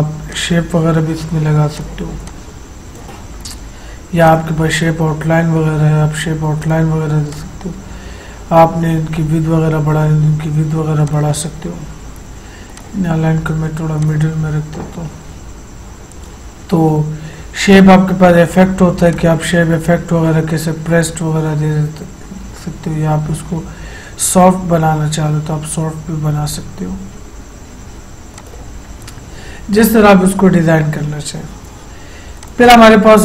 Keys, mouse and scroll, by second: 0.5-4.4 drag, 6.8 click, 11.2 click, 17.8 click, 17.8 click, 28.5 click, 28.5 click, 32.5 click.